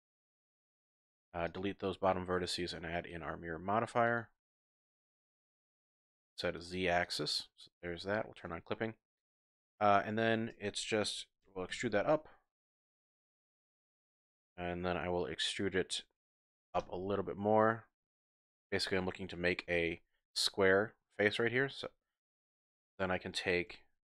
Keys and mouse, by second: 1.0 x, 2.4 drag, 3.1-3.9 drag, 4.0-5.0 drag, 5.0 typing, 6.5 click, 7.0 click, 8.4 click, 9.3-10.3 typing, 9.4 click, 10.0 click, 11.4 e, 11.7 z, 12.7 click, 13.0-14.0 shift+drag, 16.4 e, 16.8 z, 18.5 click, 19.7 z, 22.8 ctrl+click.